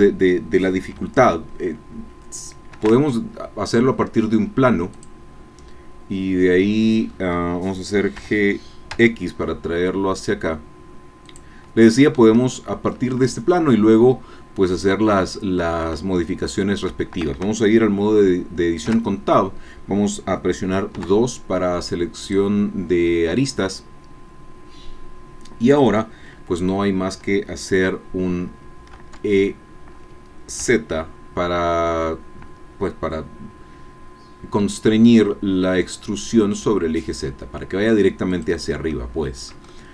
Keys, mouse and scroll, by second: 2.9 shift+a, 4.9 click, 6.8 scroll down 1, 7.1 scroll up 1, 8.1 g, 8.9 x, 11.2 click, 13.7-15.5 drag, 15.5 middle click, 15.6-16.0 scroll up 1, 16.0 shift+middle click, 16.3 shift+click, 16.9 shift+middle click, 17.9-21.2 shift+middle drag, 19.1 Tab, 20.9 2, 22.2 click, 29.1 e, 30.6 z, 38.3 click, 38.9 middle click, 39.7 shift+click.